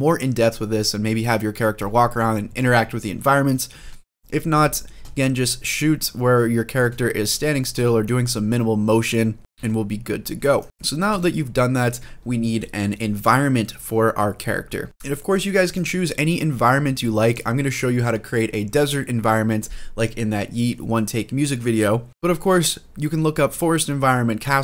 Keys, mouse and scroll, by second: 1.7 scroll down 1, 2.0-3.6 scroll up 1, 3.9 shift+middle click, 4.3 middle click, 5.0-6.1 scroll up 3, 6.1-6.6 scroll down 1, 6.6 space, 7.5 space, 7.8-9.2 drag, 9.4 shift+middle click, 9.4 g, 10.4 click, 10.6 scroll down 2, 10.9 space, 14.9 space, 15.5-16.1 drag, 17.0 click.